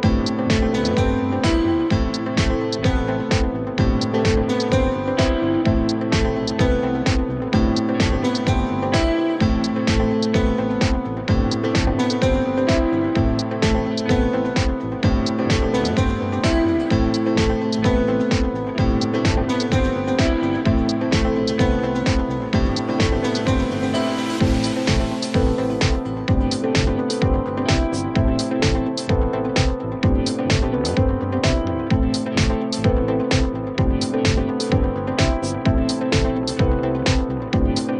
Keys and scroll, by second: 1.5 space, 6.4 space, 6.8 Escape, 8.1 Delete, 9.8 F3, 11.2 space, 12.7 F3, 16.2 Delete, 16.9 F3, 22.8 space, 32.3 ctrl+shift+q.